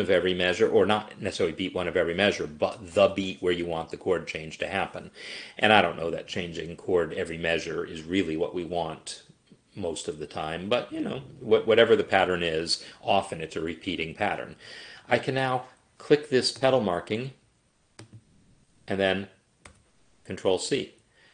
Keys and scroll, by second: 19.7 ctrl+c.